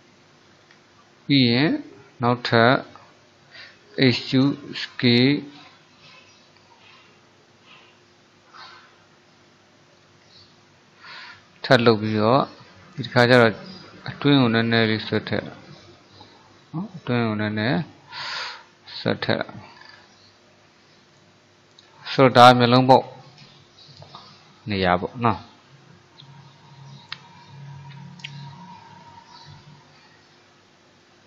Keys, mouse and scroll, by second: 0.0-0.7 scroll up 1, 0.7 alt+click, 1.3-4.0 middle drag, 4.0 e, 10.5-13.5 middle drag, 13.9 click, 16.5-19.9 middle drag, 19.9-20.4 scroll down 5, 20.4-22.0 middle drag, 22.0-22.4 scroll up 3, 22.4 click, 22.8-31.2 middle drag.